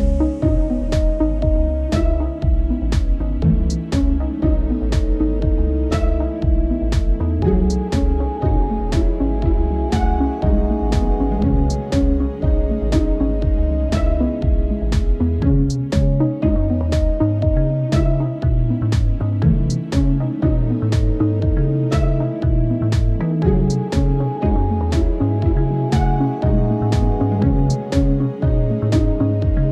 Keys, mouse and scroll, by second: 0.5 KP_0, 1.0-1.4 scroll down 6, 1.4-1.7 shift+middle drag, 1.7 scroll up 1, 2.8 scroll up 3, 3.1-3.6 middle drag, 3.6 scroll up 4, 3.8 right click, 4.0 right click, 5.3 shift+right click, 5.7 ctrl+j, 6.1 scroll up 1, 6.5 Tab, 6.7 right click, 8.1-10.3 typing, 9.0 Tab, 9.1 right click, 10.4-11.7 right drag, 11.7 Tab, 12.5 z, 13.5 a, 13.6 g, 15.8 KP_1, 16.2 scroll up 3, 16.3 shift+middle click, 16.6 g, 17.6 middle click, 17.9 s, 18.8 2, 19.6 right click, 19.9 g, 20.6 KP_7, 21.0-21.9 middle drag, 21.9 right drag, 22.0-22.4 middle drag, 22.6 s, 23.0 a, 23.1 s, 24.3 middle click, 24.8 middle click, 25.0 right click, 25.5 e, 26.8 Tab, 27.4 Tab, 27.8 w, 28.0 a, 28.1 w, 28.8 w, 29.5 right click.